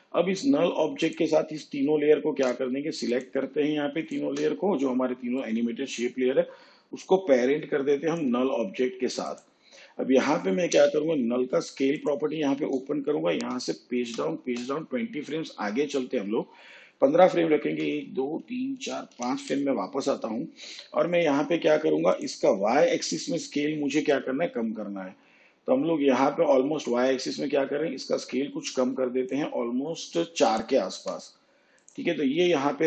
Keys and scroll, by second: 10.7 s, 13.3 shift+Page_Down, 17.6 ctrl+Left, 30.9 4.